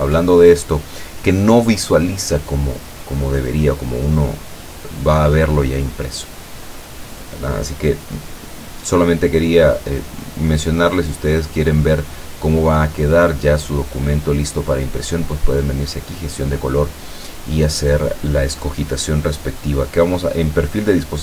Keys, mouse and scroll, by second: 10.5 click, 13.1 click.